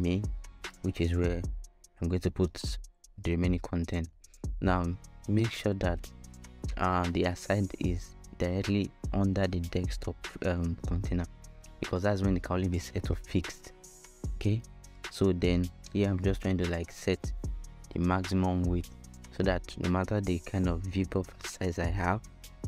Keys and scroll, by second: 7.5-8.9 typing, 11.6-13.0 typing, 19.0-20.2 typing, 21.2 Return.